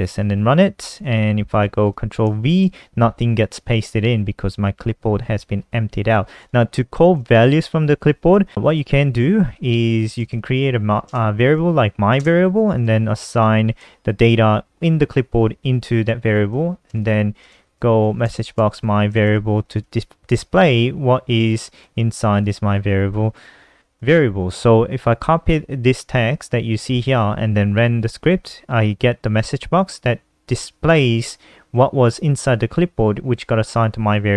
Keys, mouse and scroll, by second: 0.0 ctrl+s, 0.3 F5, 1.1 super+n, 1.9 click, 2.3 ctrl+v, 3.7 click, 4.0 alt+F4, 6.4 click, 7.3 shift+Home, 8.1-13.9 typing, 15.9 Return, 16.0-20.0 typing, 17.1 Return, 21.4 ctrl+s, 22.0 click, 22.8 click, 23.7 ctrl+c, 27.8 F5.